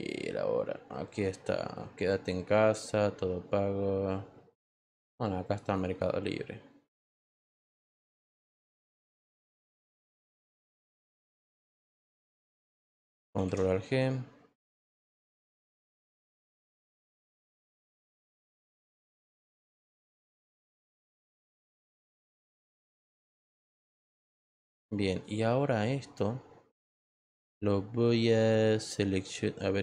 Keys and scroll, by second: 12.2 Return.